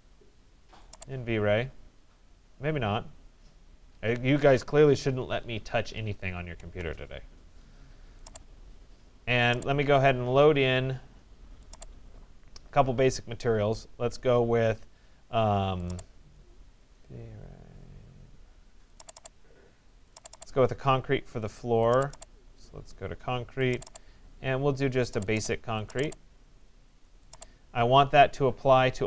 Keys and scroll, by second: 6.2 alt+Return.